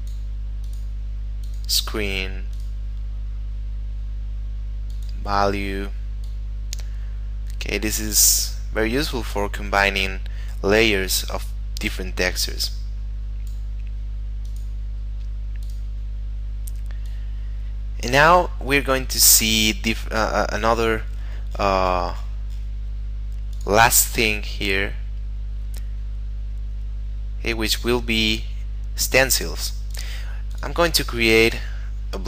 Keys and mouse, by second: 0.6 click, 4.9 click, 14.5 click, 23.5 click, 30.0 click.